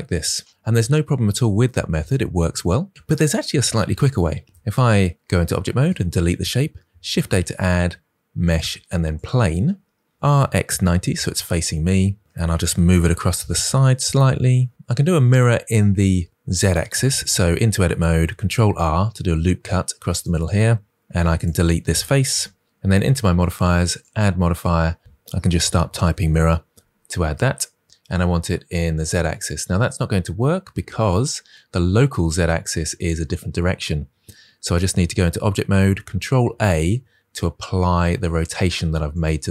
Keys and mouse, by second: 4.4 Tab, 5.6 Delete, 7.0 shift+a, 10.3 r, 10.3 x, 10.5 9, 10.6 0, 11.0 Return, 13.0 g, 17.3 Tab, 18.2 ctrl+r, 20.0 click, 20.9 3, 21.2 click, 22.2 Delete, 24.0-27.8 drag, 27.8 r, 28.8 click, 29.3 click, 35.0 Tab, 36.3 ctrl+a.